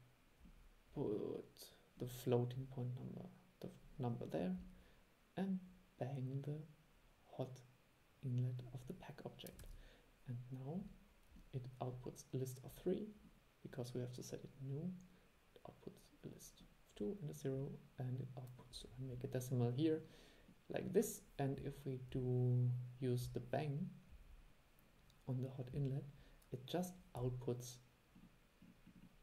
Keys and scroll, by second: 9.7 super+e.